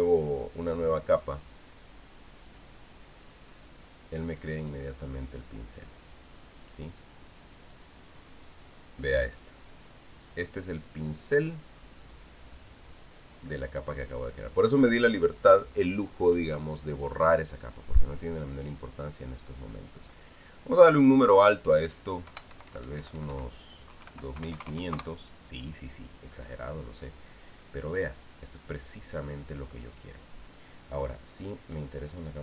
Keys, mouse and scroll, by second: 1.4 click, 3.3 click, 5.4 click, 8.5 click, 21.7 click, 23.3 Delete, 24.8-25.8 typing.